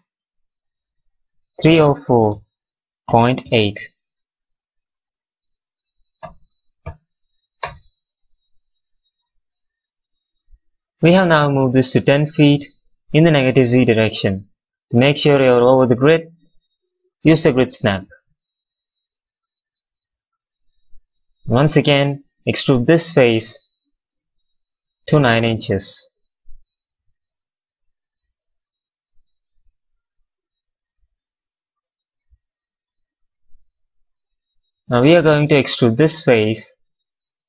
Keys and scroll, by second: 1.2-2.1 typing, 3.3 8, 4.9 BackSpace, 6.8 8, 7.5 Return, 17.3 x, 24.1 w, 27.1 x, 31.5 space, 35.9 space.